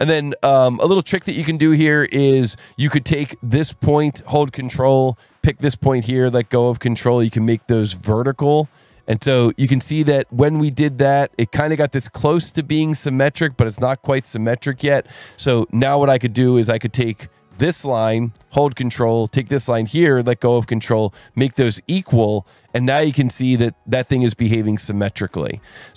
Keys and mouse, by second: 3.8 click, 5.9 ctrl+click, 7.4 click, 8.0 click, 9.6 click, 18.3 click, 19.5 ctrl+click, 21.7 click, 22.5 click, 23.5 click.